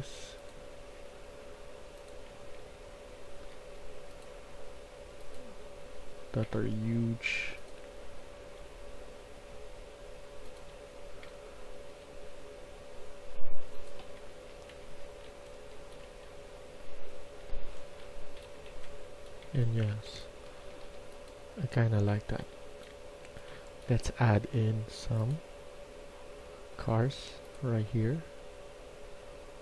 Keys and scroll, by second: 1.9-3.0 typing, 5.5-6.4 d, 7.8-8.4 a, 10.6-11.7 typing, 14.0 Escape, 14.2 Escape, 14.5-19.8 typing, 20.5 Escape, 20.7 Escape, 21.8-24.4 typing.